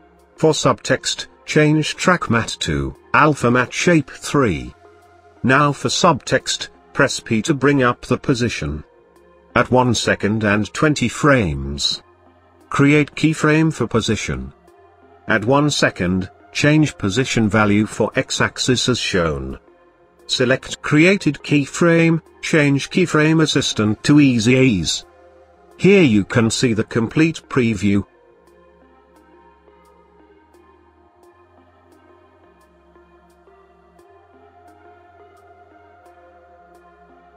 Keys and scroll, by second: 5.8 p, 6.3 p.